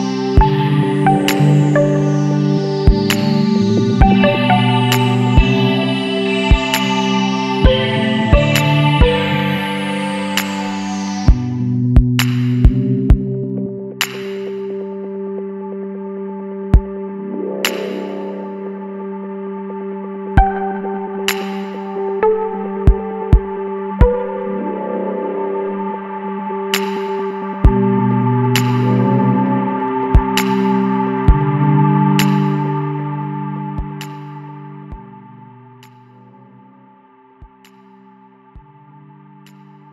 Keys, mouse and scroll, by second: 1.6 scroll down 1, 1.6-1.9 middle drag, 1.9 Tab, 2.2 scroll down 1, 2.3-2.8 middle drag, 2.8 alt+a, 3.0 scroll down 1, 3.1-3.5 middle drag, 3.5 ctrl+s, 3.8 scroll down 3, 4.0-4.6 middle drag, 4.6 scroll up 1, 4.9-9.9 middle drag, 10.5 click, 10.8 shift+middle drag, 11.0 scroll up 1, 11.4 middle drag, 11.7-12.4 scroll up 1, 12.4-13.0 scroll up 1, 13.0 Tab, 13.3 a, 14.3 click, 15.5 middle click, 15.8 Tab, 16.7 shift+h, 17.1-17.4 middle drag, 17.4 scroll up 1, 17.7-18.0 middle drag, 18.0 scroll up 1, 18.2 alt+a, 18.7 alt+shift+click, 19.5 2, 19.8 alt+a, 20.2 alt+shift+click, 20.8 alt+shift+click, 21.1-22.2 middle drag, 22.2 ctrl+b, 24.6 Tab, 24.7-25.2 middle drag, 25.2 scroll down 2, 25.4-26.1 middle drag, 26.1 alt+h, 26.4 scroll down 2, 26.5 middle click, 26.8 alt+a, 27.1 scroll down 2, 27.3 middle click, 27.7 ctrl+s, 28.1 middle click, 28.2 scroll up 1, 31.1 scroll up 1, 31.2-32.5 middle drag, 32.5 alt+a, 32.7-34.2 middle drag, 34.2-35.2 scroll up 4, 34.7 shift+middle drag, 35.2-35.6 middle drag, 35.6 ctrl+s, 36.0-36.7 shift+scroll down 4, 36.0 shift+middle click, 36.7-37.6 middle drag, 37.6 click, 37.9-38.3 shift+middle drag, 38.3 scroll down 2, 38.5 middle click, 38.8 ctrl+s, 39.2 alt+a, 39.3 scroll down 1, 39.5 shift+middle click.